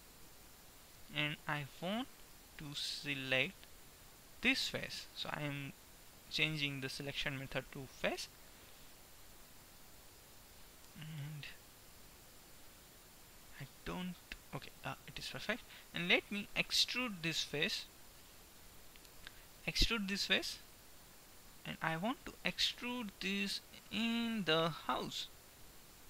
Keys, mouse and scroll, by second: 0.2 Tab, 2.2-4.0 drag, 4.8-6.7 right drag, 14.8-17.2 middle drag, 19.8 e.